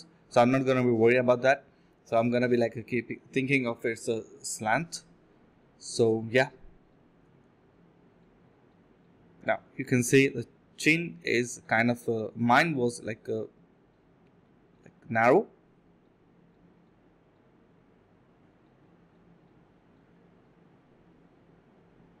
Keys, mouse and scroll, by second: 4.1 1, 5.3 alt+click, 5.8 alt+click, 11.3 alt+click, 11.5 alt+click, 11.9 typing, 14.2 alt+click, 14.6 alt+click, 16.2 ctrl+shift+z, 16.3 alt+click, 16.8 alt+click, 17.3 typing, 18.4 typing, 20.8 alt+click, 21.0 alt+click, 21.1 alt+click, 21.4 alt+click, 21.6 alt+click, 21.8 alt+double click.